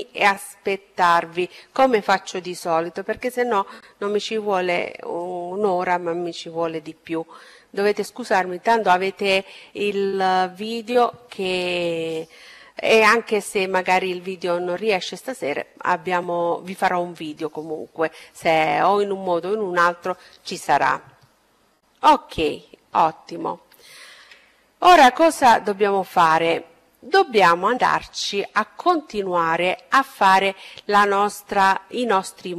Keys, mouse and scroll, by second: 20.9-24.4 middle drag, 25.9-27.9 middle drag.